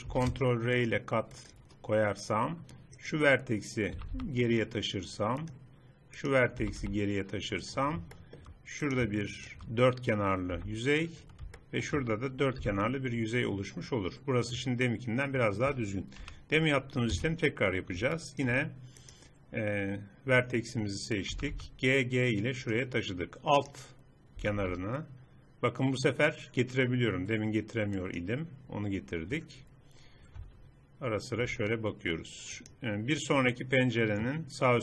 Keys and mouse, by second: 0.2 ctrl+r, 1.9 middle click, 3.1 click, 4.1 g, 6.3-7.9 drag, 6.7 g, 8.9-9.9 drag, 10.2 click, 10.6 f, 12.7 f, 16.3 KP_3, 17.2 z, 19.1 click, 21.5 g, 23.7 right click, 24.5 g, 28.8-30.5 middle drag, 30.5 z, 31.5 z.